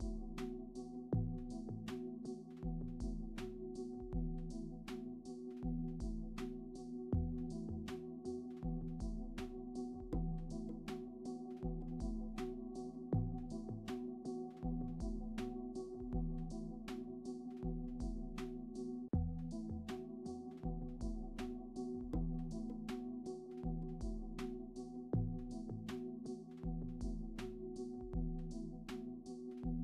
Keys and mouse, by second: 0.8 r, 1.8 right click, 2.2 click, 2.6-5.4 shift+drag, 5.8 right click, 6.2 click, 7.2 r, 9.5 click, 10.3-11.8 drag, 12.3 click, 13.1 click, 13.8-14.9 drag, 15.2 click, 16.0 click, 16.7-18.8 drag, 19.0 ctrl+s, 21.0 middle click, 21.3 r, 26.1 middle drag, 26.4 r, 27.6 right click, 27.7 g, 28.7-29.8 drag.